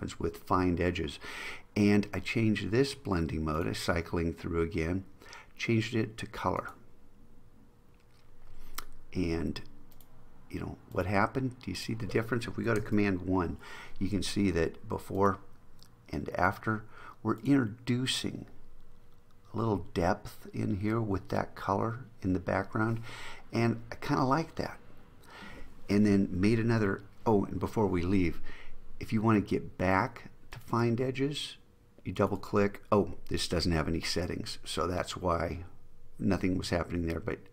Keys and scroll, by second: 12.9 super+1.